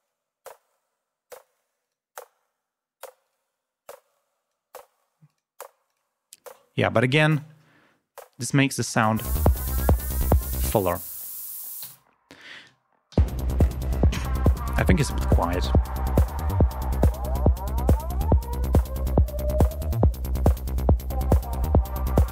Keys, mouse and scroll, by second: 1.8 click, 3.3 click, 4.1 click, 5.3 click, 5.9 click, 7.3 click, 9.2 click, 9.7 ctrl+scroll down 2, 10.8 space, 10.8 click, 11.9 ctrl+alt+p, 13.1 l, 13.8 ctrl+scroll up 2, 15.6 click, 17.5 click, 18.0 scroll down 2.